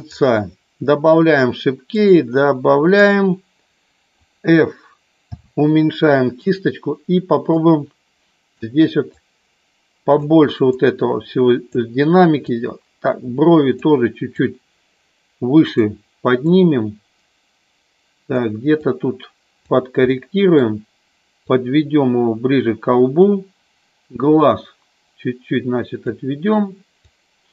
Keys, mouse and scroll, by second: 2.0 click, 5.2 f, 7.5-8.6 drag, 9.1 click, 10.8 click, 12.5-13.8 drag, 14.4-15.8 drag, 16.5-18.3 drag, 18.9 click, 20.0 middle click, 21.4-23.3 drag, 24.0-26.0 drag, 27.0-27.5 drag.